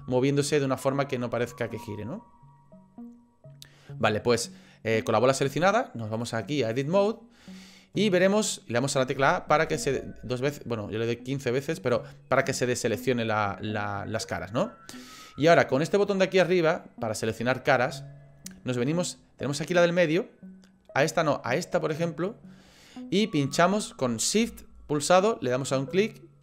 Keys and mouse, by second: 6.1 click, 9.2 a, 9.6 a, 9.8 a, 25.7 shift+click.